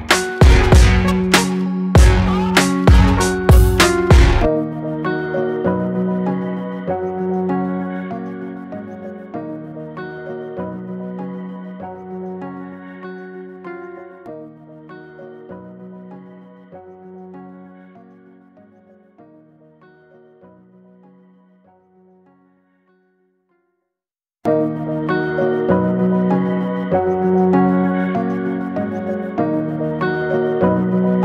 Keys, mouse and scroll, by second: 1.1 ctrl+click, 2.1-4.0 middle drag, 4.4-5.6 middle drag, 6.9 ctrl+click, 8.6 ctrl+click, 9.7-12.9 ctrl+middle drag, 13.4 alt+z, 14.5 x, 15.9 Tab, 16.3-18.2 middle drag, 18.9 click, 19.0 Tab, 19.5 click, 20.6 click, 20.9-22.9 middle drag, 25.3 scroll up 1, 25.4 middle click, 25.9-26.2 scroll up 1, 26.2 middle click, 27.0 e, 28.4 middle click, 28.9-29.5 scroll up 1, 29.5 e.